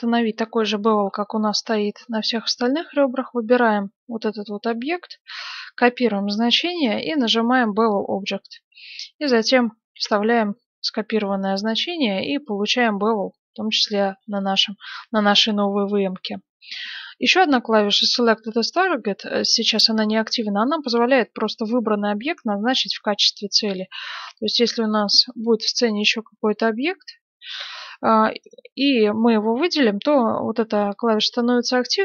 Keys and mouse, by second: 0.9-2.0 middle drag, 2.0-3.6 drag, 3.6 middle click, 3.7 click, 3.8-6.7 middle drag, 6.7 ctrl+c, 7.9-9.8 drag, 9.9 ctrl+v, 11.5-24.1 middle drag, 21.2-26.4 drag, 24.1 shift+a, 25.5 s, 27.5-30.3 right drag.